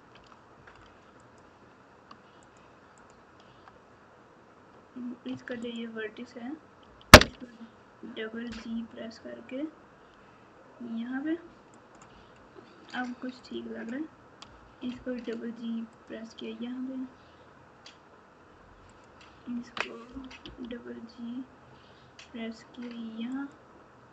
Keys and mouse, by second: 1.1 click, 2.4 click, 3.0 click, 5.3 1, 6.8 g, 13.4 click, 14.4 g, 18.9 click, 20.1 g.